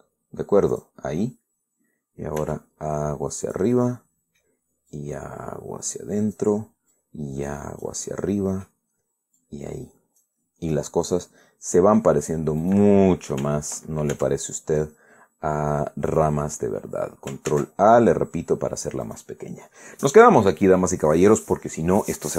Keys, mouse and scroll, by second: 1.4 click, 3.1 g, 4.1 click, 4.5 scroll down 2, 5.6-7.2 drag, 7.6-8.7 drag, 10.1-11.1 drag, 11.1 scroll down 1, 11.4 middle click, 11.8-12.9 drag, 13.3 right click, 14.8 ctrl+e, 16.8 click, 18.2 ctrl+a, 19.8 click.